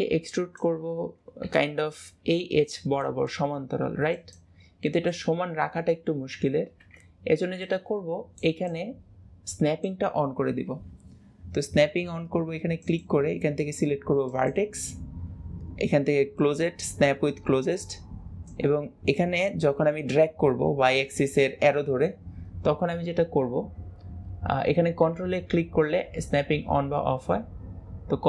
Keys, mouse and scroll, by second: 12.9-16.0 drag, 18.5 click.